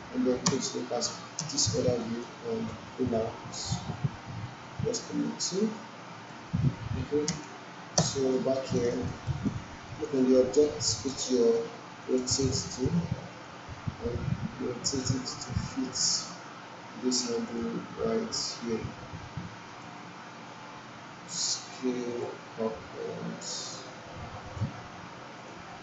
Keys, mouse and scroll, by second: 0.4 space, 2.0 alt+click, 3.1-6.5 drag, 7.3 space, 8.5 alt+right click, 8.9 alt+middle click, 9.3 alt+right click, 9.9-15.3 drag, 16.1-20.1 drag.